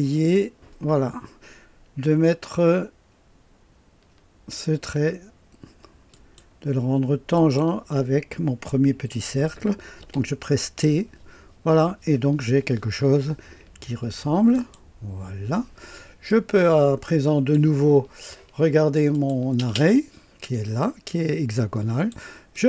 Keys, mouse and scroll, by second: 6.0 click, 7.3 click, 9.9 t, 14.4 click, 16.2-17.5 drag, 19.0 click, 19.5 space, 20.3-22.1 drag, 22.4 click.